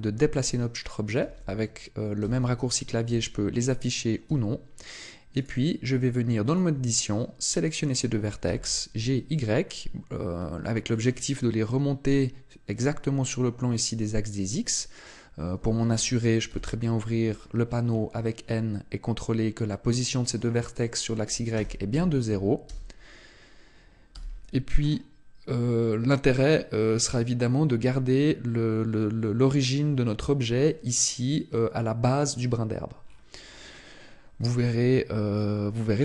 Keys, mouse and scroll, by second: 1.2 ctrl+space, 2.2 ctrl+space, 3.0 ctrl+space, 4.2 Tab, 5.4 right click, 6.4 shift+right click, 8.4 g, 11.0 click, 16.5 n, 17.4-18.6 scroll up 16, 20.3 click, 24.1 n, 24.8-25.6 scroll up 4, 33.0-33.5 scroll down 1, 33.5-34.7 scroll up 2, 34.7 scroll up 2.